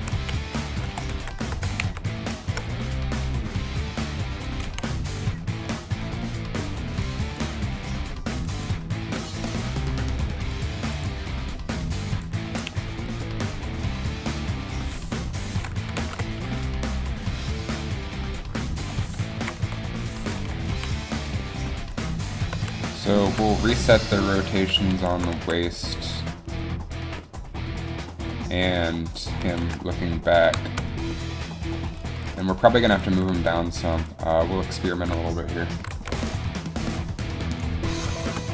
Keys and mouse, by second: 0.1 a, 0.3 a, 1.0 alt+r, 1.3 alt+g, 3.9 ctrl+z, 4.8 a, 18.0 ctrl+z, 19.6 Left, 19.8 Right, 20.8 a, 22.7 z, 23.5 z, 24.6 z, 25.1 alt+r, 25.5 z, 29.6 alt+r, 35.9 g, 36.0 g.